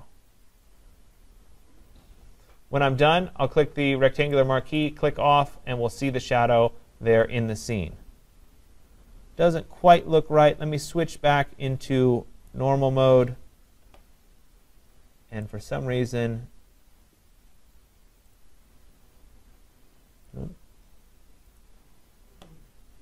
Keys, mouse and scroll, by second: 4.3 click, 12.5 click, 15.6 click, 20.3 click, 21.8 click.